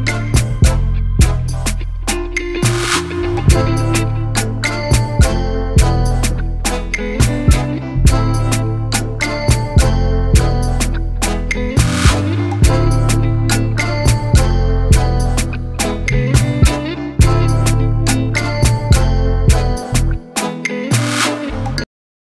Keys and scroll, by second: 0.5 ctrl+0.